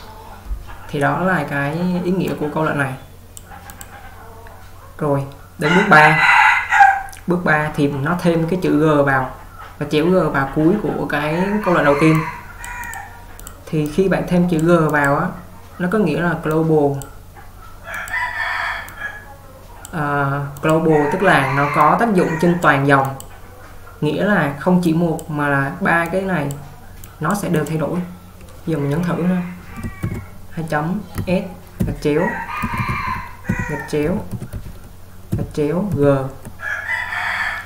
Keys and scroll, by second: 30.2 typing, 31.3-36.0 typing.